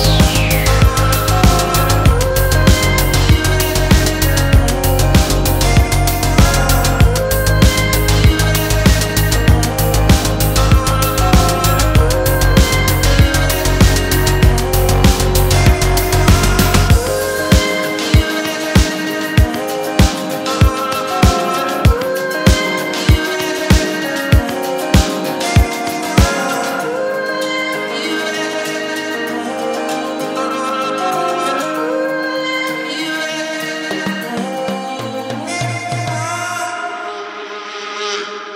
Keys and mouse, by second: 2.3 Tab, 2.8-4.3 drag, 4.4 shift+click, 4.7-5.5 drag, 5.7 click, 5.9 alt+2, 7.8-8.9 drag, 8.9 middle click, 8.9 ctrl+click, 10.3 ctrl+n, 11.5 ctrl+b, 14.4 Tab, 15.0-17.3 drag, 18.2 shift+click, 18.7 click, 19.3 shift+drag, 19.8-21.2 drag, 21.9 drag, 23.0-23.6 drag, 23.0-23.6 right drag, 24.2-26.6 middle drag, 27.4-28.5 middle drag, 28.8-29.8 middle drag, 31.3 Tab, 31.8 shift+click, 32.7 3, 35.2 shift+click, 36.7 shift+click, 37.5 shift+click, 38.0-38.5 middle drag.